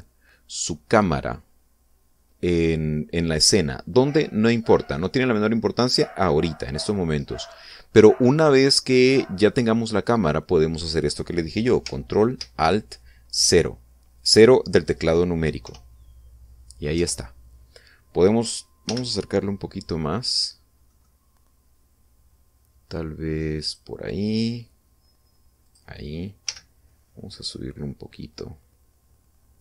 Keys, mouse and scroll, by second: 5.5-6.0 scroll down 2, 6.9-7.3 scroll up 2, 7.5-8.0 scroll up 1, 8.2-8.7 scroll down 1, 10.2-10.7 scroll down 2, 16.3 ctrl+alt+0, 19.5 g, 21.5 middle click, 26.3 click, 27.1 g.